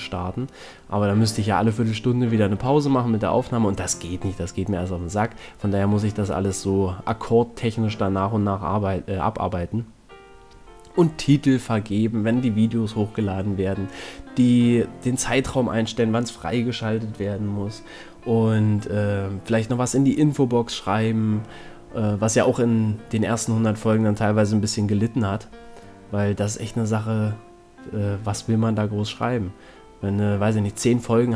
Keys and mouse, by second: 3.7 c, 5.6 g, 8.4-10.5 drag, 8.8 a, 9.2 c, 13.0 c, 17.3 c, 18.5-20.8 drag, 20.6 KP_Decimal, 22.7 g, 25.1-26.5 drag, 25.2 a, 26.5 z, 26.6 middle click, 27.0 middle click, 27.3 middle click, 30.4 middle click, 30.5 z, 30.9 middle click.